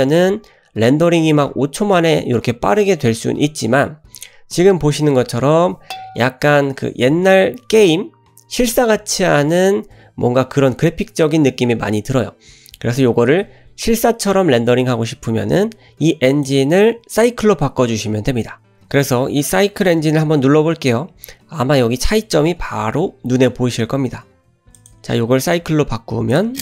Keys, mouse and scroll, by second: 16.3-21.2 drag, 24.8-26.6 drag.